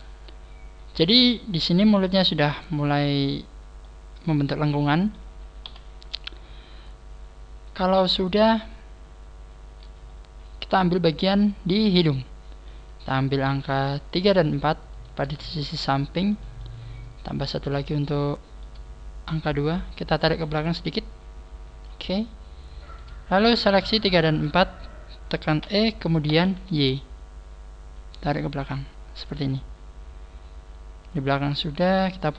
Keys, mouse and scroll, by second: 3.8 middle click, 5.4 scroll down 5, 5.7 KP_1, 6.6 scroll up 4, 7.4-7.8 scroll up 3, 8.9 scroll up 1, 8.9 scroll down 4, 9.7 scroll down 3, 10.3 scroll down 1, 12.9 right click, 14.3 shift+middle click, 15.1 shift+right click, 16.3 shift+middle click, 17.3 shift+right click, 18.3 shift+middle click, 18.9 scroll down 1, 20.3 click, 20.3 scroll down 1, 22.9 right click, 23.3 shift+right click, 24.9 shift+right click, 25.6 e, 30.2 click, 31.8 click.